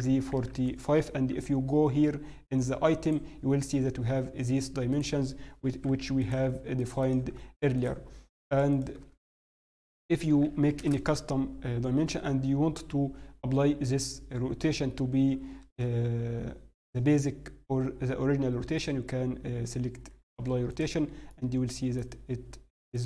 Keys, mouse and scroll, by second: 1.3 r, 1.3 n, 3.0 click, 15.6 ctrl+a, 18.6 c, 20.2 ctrl+a, 21.3 middle click, 22.1-22.4 scroll up 1, 22.9 click, 22.9-23.0 scroll up 1.